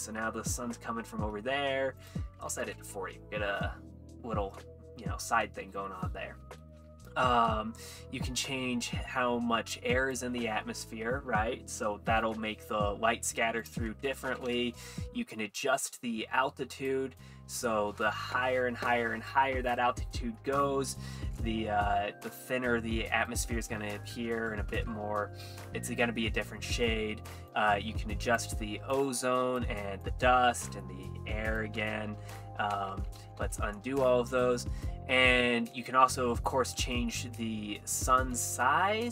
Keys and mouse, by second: 2.0 click, 8.5-10.2 drag, 10.8 middle click, 13.6 click, 15.6-16.9 drag, 17.2-19.8 drag, 20.4 middle click, 21.7 middle click, 27.5-28.4 drag, 29.0-29.6 drag, 30.1-31.6 drag, 32.4 middle click, 32.9 ctrl+z, 33.2 ctrl+z, 35.7 ctrl+z, 35.7 click, 37.1 middle click, 38.6 shift+z, 39.0-39.1 shift+middle drag.